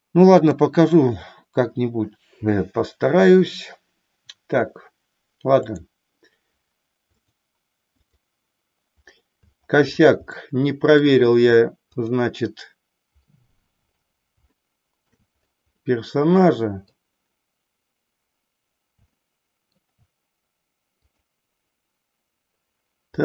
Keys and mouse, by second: 0.3 click, 5.7 click, 7.1-8.3 drag, 10.4 middle click, 12.1 click, 14.7 shift+middle click, 15.8-16.9 middle drag, 19.1 shift+middle click, 21.1 click.